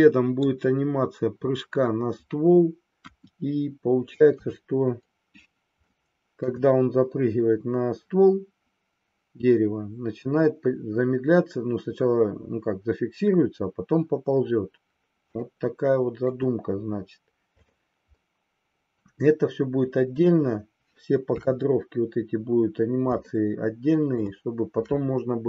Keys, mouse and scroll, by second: 3.0 KP_1, 4.3 KP_3, 5.8-6.5 shift+middle drag, 15.5-16.3 shift+middle drag, 17.6 click, 18.2-19.1 middle drag, 21.2 KP_3, 23.3 shift+middle click.